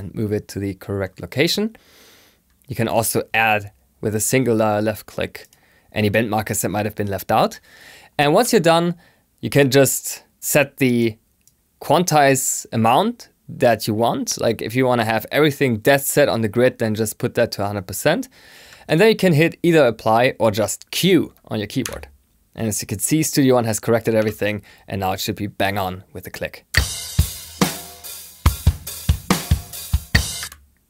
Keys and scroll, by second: 19.2 i, 21.7 q.